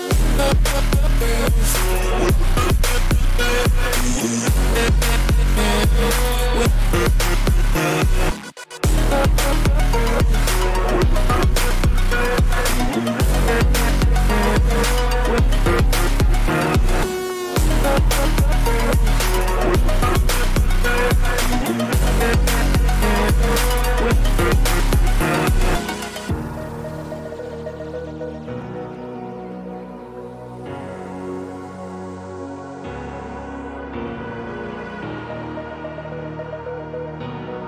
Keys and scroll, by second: 4.2-5.7 typing, 10.2-11.2 typing, 16.5-19.0 typing, 20.4 ctrl+-, 20.8 ctrl+-, 21.9 t, 24.4 1, 24.8 k, 31.0 Return, 31.2 ctrl+=, 31.2 v, 33.3 ctrl+t, 35.6 Return, 35.8 =.